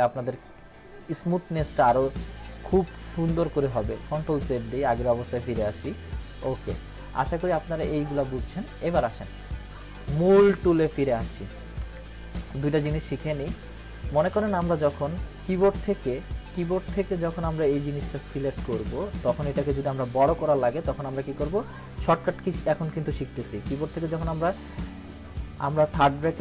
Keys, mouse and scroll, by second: 4.0 ctrl+-, 4.4 ctrl+z, 11.2 ctrl+z, 11.8 ctrl+=, 12.8 ctrl+-, 13.9 scroll up 1, 26.0-26.4 typing.